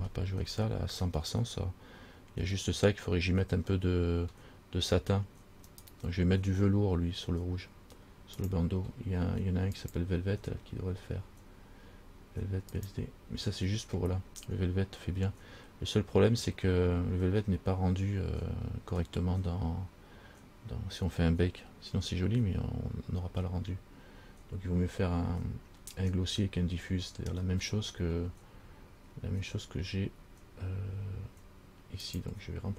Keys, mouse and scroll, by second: 5.9 right click, 8.6 click, 10.0 click, 29.0-29.4 scroll down 1, 29.4-32.2 scroll up 1, 32.3 click.